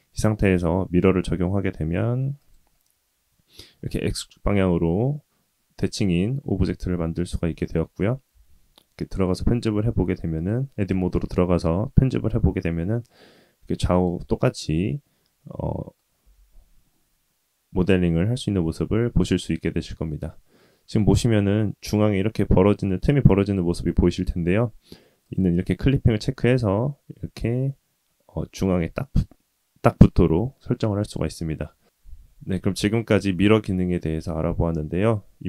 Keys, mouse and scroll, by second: 3.8 middle drag, 7.6-8.1 middle drag, 8.3 Tab, 9.0 middle click, 9.4-10.3 scroll up 2, 10.3 click, 12.6 g, 14.7-16.0 middle drag, 16.2 g, 25.2 click, 26.2 g, 31.6 middle click, 32.4 scroll down 2, 33.6-35.4 middle drag.